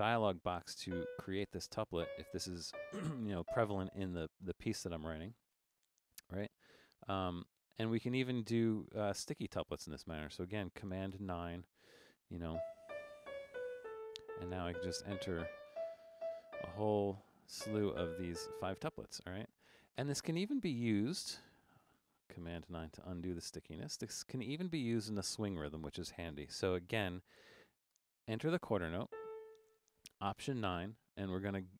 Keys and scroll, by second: 0.9-3.4 typing, 11.1 super+9, 12.2-18.8 typing, 20.1 Right, 22.7 super+9, 24.4 5, 28.0 5, 29.1 a, 30.4 alt+9.